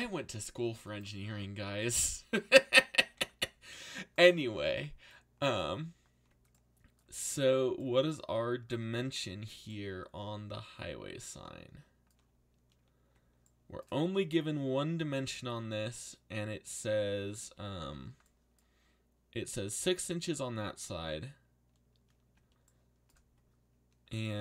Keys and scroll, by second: 2.8-3.8 typing.